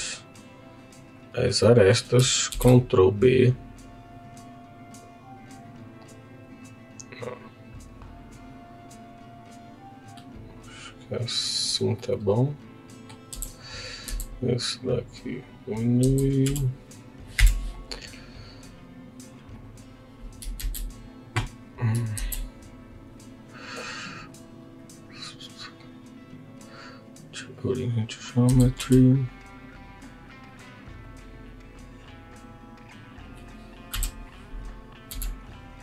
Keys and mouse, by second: 1.5 click, 2.5 ctrl+b, 12.0-13.1 middle drag, 13.3 Tab, 13.6 click, 14.1 s, 15.4 click, 15.9 s, 16.4 y, 17.4 Escape, 18.1 click, 18.6-20.1 right drag, 20.5 shift+a, 22.1 shift+s, 24.1 right click, 28.4 s, 28.8 y, 30.5 click, 33.9 KP_1, 35.0 z.